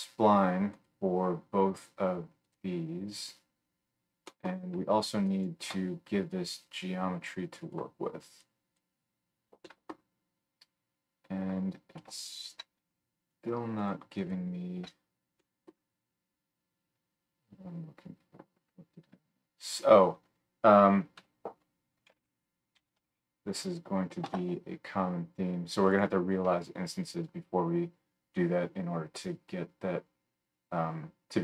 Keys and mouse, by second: 13.4 alt+shift+right click, 13.7 alt+shift+middle click, 13.9 alt+shift+right click, 14.1 alt+shift+middle click, 14.3-18.7 alt+shift+right drag, 18.7-21.3 middle drag, 21.3 F3, 30.9-31.4 right drag.